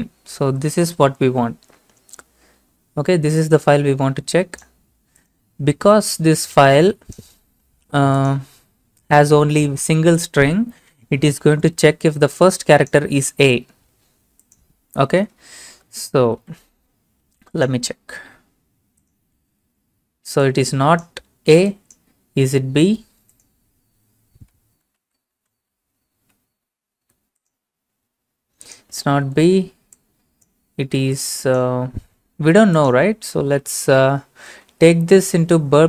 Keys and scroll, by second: 0.0-0.9 typing, 15.8 ctrl+a, 16.2 ctrl+c, 19.5 ctrl+v, 24.8 BackSpace, 25.0 b, 25.6 ctrl+a, 26.2 ctrl+a, 27.0 ctrl+c, 29.1 ctrl+v, 33.2 ctrl+a, 33.6 ctrl+c, 34.7 alt+Tab, 35.6 alt+Tab, 35.8 alt+Tab.